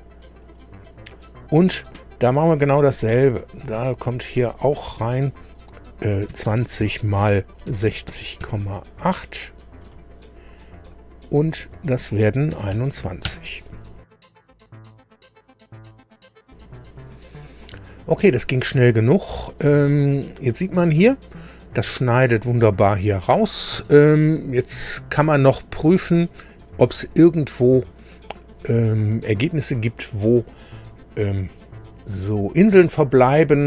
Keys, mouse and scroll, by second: 3.3 click, 4.6 click, 6.3 KP_2, 6.5 KP_0, 7.7 KP_6, 7.9 KP_0, 8.4 KP_8, 9.8 click, 11.4 click, 12.5 KP_2, 12.7 KP_1, 13.3 Return, 18.8-19.6 scroll up 2, 20.2-20.5 scroll up 2, 20.7 scroll down 2, 26.6-27.0 scroll up 2, 27.7 scroll up 2, 29.1-29.5 scroll down 2, 31.5-31.8 scroll down 1.